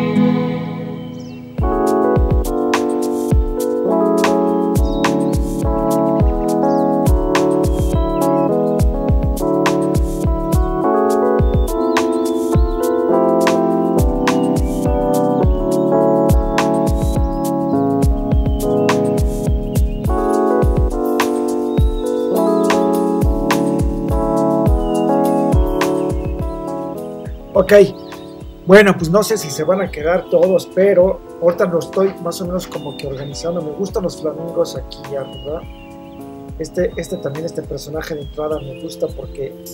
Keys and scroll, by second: 1.0 shift+Return, 1.2 Down, 3.6 super+c, 4.4 super+t, 6.2 Right, 6.6 Return, 9.7 super+c, 13.4 shift+Return, 14.1 super+z, 17.2 super+z.